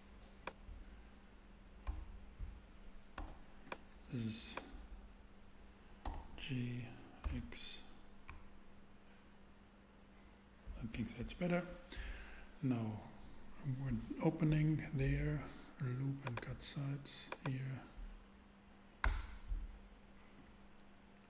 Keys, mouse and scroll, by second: 1.8 a, 3.1 b, 3.3 b, 6.0 g, 6.1 g, 7.2 x, 8.2 ctrl+x, 19.0 Return.